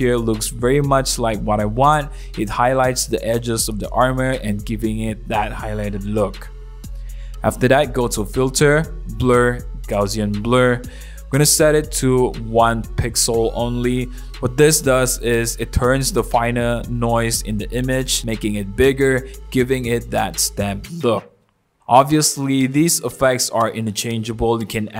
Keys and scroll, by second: 14.1 1, 16.8 super+=, 17.1 super+=, 17.4 super+=, 17.8 super+=.